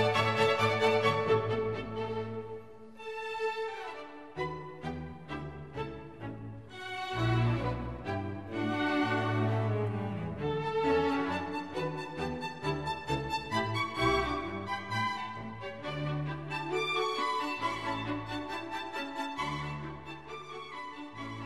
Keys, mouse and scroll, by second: 0.0-1.1 typing, 2.0 ctrl+a, 10.3 click, 10.5 click, 10.7 click, 11.1 click, 15.2 ctrl+=, 15.7 ctrl+=, 17.2-17.9 scroll up 5, 18.3-19.8 scroll up 12.